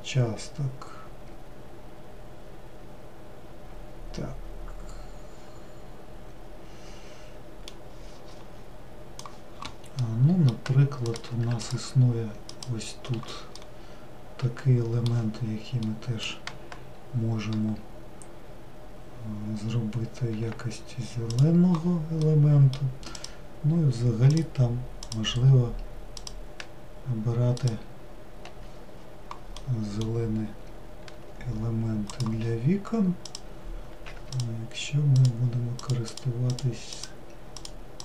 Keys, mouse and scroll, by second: 10.1-11.3 middle drag, 11.3 click, 12.7 alt+click, 13.7-20.5 middle drag, 20.5 g, 22.3-23.3 middle drag, 23.3 click, 24.5 alt+click, 25.2 alt+click, 27.8 alt+click, 31.3 g, 33.5 click, 35.3-37.2 alt+click, 37.8 alt+click.